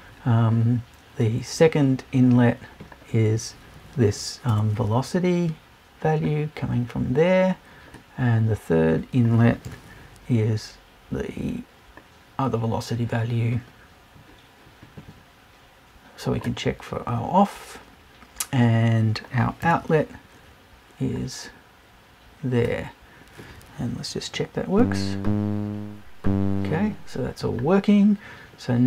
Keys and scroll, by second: 4.5 BackSpace, 9.6 BackSpace, 19.6 BackSpace.